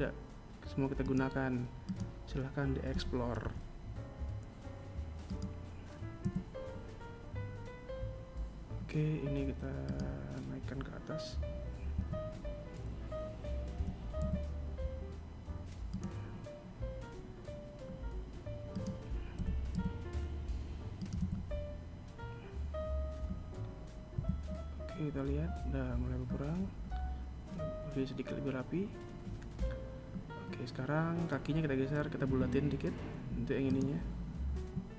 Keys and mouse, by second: 0.2 right click, 1.2 g, 4.5 a, 8.1 right click, 10.2 KP_1, 12.0 g, 17.0 right click, 17.6 g, 19.7 a, 22.4 Tab, 30.5 Tab, 31.9 right click, 34.1 shift+right click, 34.7 shift+right click.